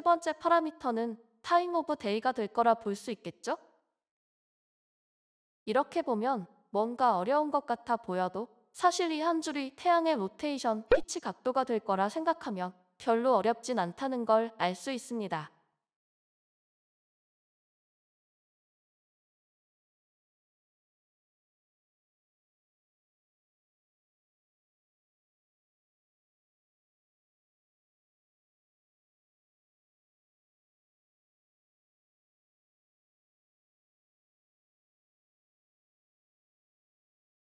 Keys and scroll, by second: 0.2 typing, 12.3 ctrl+x, 13.3 typing, 13.4 ctrl+v, 13.6 ctrl+Left, 13.8 ctrl+Left, 14.2 ctrl+Left, 14.4 ctrl+Left, 14.5 ctrl+Left.